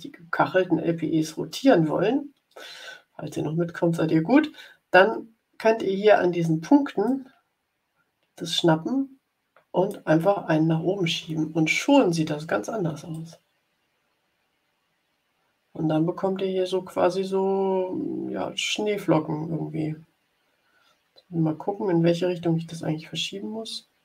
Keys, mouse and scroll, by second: 7.0-10.1 drag, 13.0-24.0 drag.